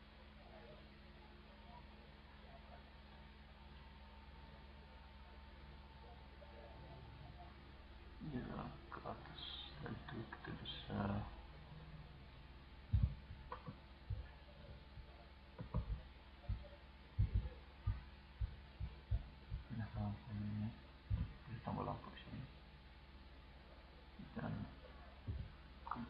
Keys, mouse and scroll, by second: 21.2-23.0 drag, 25.3 c.